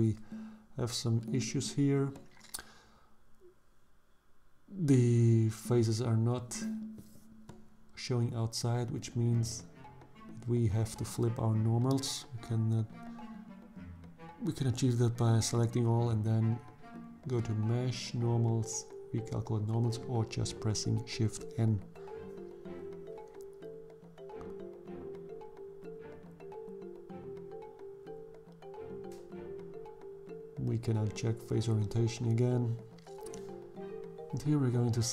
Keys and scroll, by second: 11.2 a, 24.9 Tab, 31.3 Tab, 32.8 2.